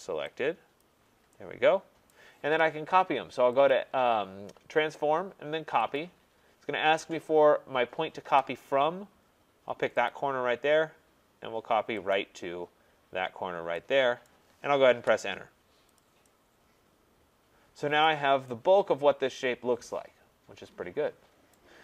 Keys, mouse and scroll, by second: 0.8 click, 2.1 right click, 3.7 click, 6.0 click, 10.1 click, 12.1 click, 14.2 right click, 14.9 Return, 16.0 click, 18.0 right click, 21.5 right click.